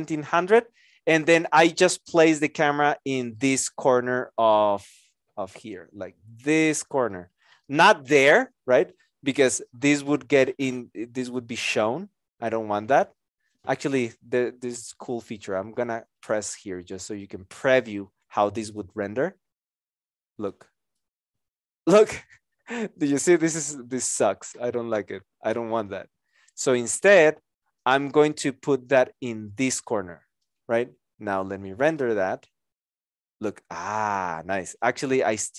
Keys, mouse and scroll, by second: 7.6 alt+click.